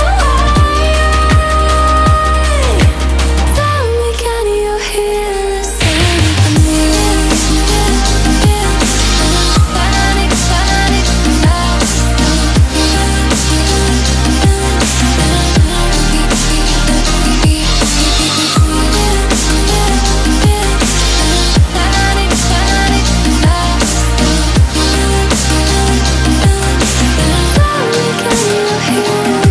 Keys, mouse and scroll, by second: 0.6 click, 1.7 click, 3.3 click, 4.2 alt+scroll down 1, 4.4-4.7 alt+scroll up 1, 4.7 click, 5.0 alt+scroll down 1, 5.1 alt+scroll up 1, 5.8 click, 6.5-7.3 typing, 7.4 click, 7.8 alt+scroll down 1, 8.0 alt+scroll up 1, 8.3 click, 8.5 alt+scroll down 1, 9.2 shift+[, 9.8 ctrl+], 10.3 click, 10.6 alt+scroll up 1, 11.0 click, 11.6 ctrl+shift+[, 12.1 ctrl+], 13.1 click, 13.5 alt+scroll down 1, 13.8 alt+scroll up 1, 14.4 ctrl+z, 14.7 alt+scroll down 1, 14.9 alt+scroll up 1, 15.2 click, 16.5 ctrl+z, 17.1 alt+scroll up 1, 17.7 click, 18.2 alt+scroll down 1, 19.2 alt+scroll up 1, 19.8 click, 21.4 ctrl+shift+], 22.1 alt+scroll down 1, 22.6 click, 22.9-23.3 alt+scroll down 1, 23.3-23.6 alt+scroll up 1, 24.5 alt+scroll up 1, 25.0 click.